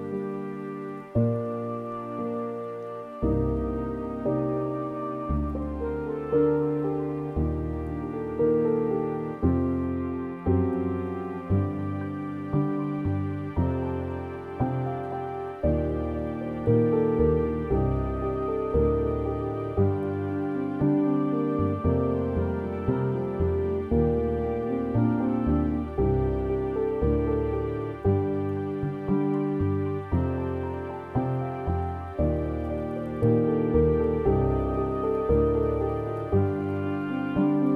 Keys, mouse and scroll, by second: 3.4 right click, 4.2-4.5 scroll down 2, 4.6 a, 5.3-7.7 middle drag, 7.7 Tab, 8.0 Tab, 15.9-18.1 middle drag, 18.1 click, 19.7-20.4 scroll down 11, 21.4-26.1 drag, 28.6 click, 32.2 click.